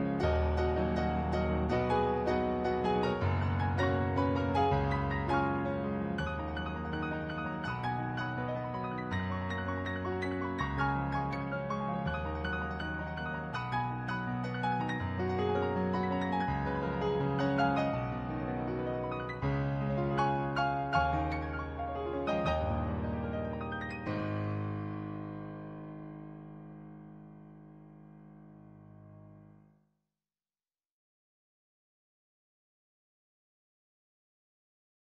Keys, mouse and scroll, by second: 0.4 ctrl+z, 2.0 ctrl+z, 3.0 ctrl+z, 3.7 ctrl+z, 4.2 ctrl+z, 5.6 ctrl+z.